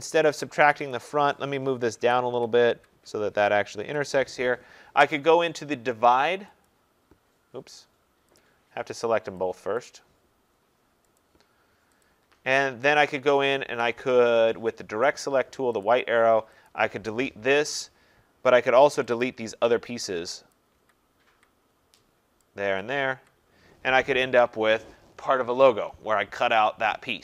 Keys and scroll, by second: 1.9 Down, 3.8 Down, 17.6 Delete.